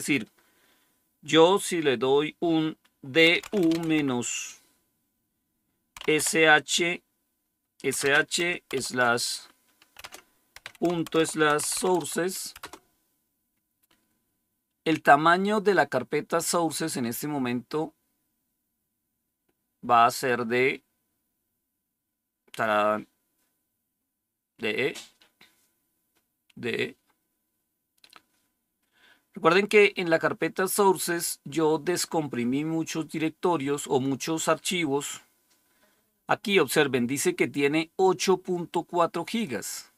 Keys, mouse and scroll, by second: 2.9-4.2 typing, 5.9-6.2 typing, 7.8-8.6 typing, 9.9-12.2 typing, 12.5 Return, 37.9-39.9 drag.